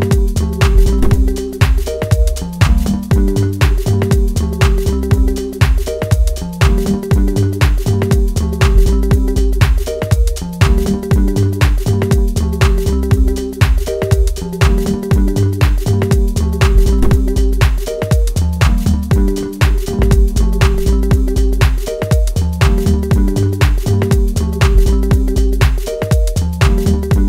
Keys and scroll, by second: 9.8 ctrl+space.